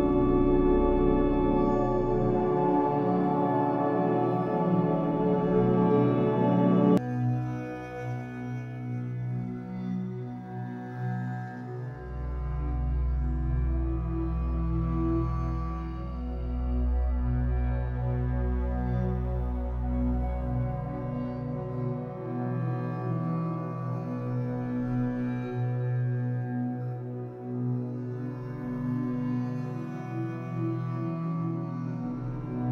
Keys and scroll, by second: 15.1 ctrl+i, 31.7 ctrl+z.